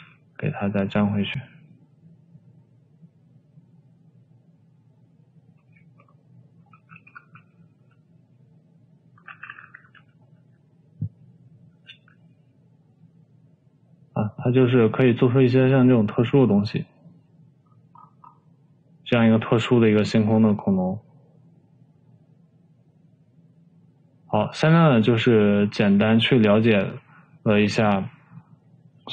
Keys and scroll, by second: 0.1 ctrl+c, 0.4 ctrl+c, 0.7 v, 6.7 ctrl+v, 7.6 ctrl+v, 8.2 v, 10.2 ctrl+c, 10.4 ctrl+c, 10.9 v, 12.7 ctrl+v.